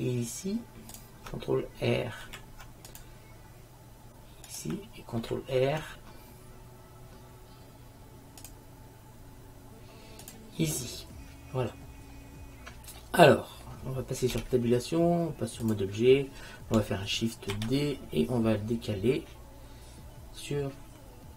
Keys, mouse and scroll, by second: 2.4 ctrl+r, 5.3 ctrl+r, 10.9 middle click, 11.7-12.8 drag, 12.8 middle click, 13.1 click, 13.3 middle click, 13.8 click, 14.4 Tab, 17.6 shift+d.